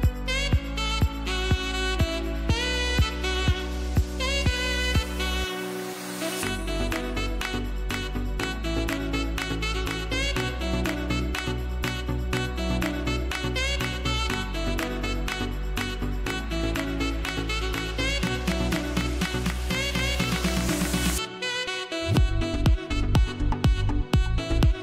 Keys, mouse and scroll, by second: 4.5-5.2 scroll down 1, 5.6 space, 5.8 click, 6.1 space, 8.3 ctrl+shift+a, 13.8 click, 16.2 click.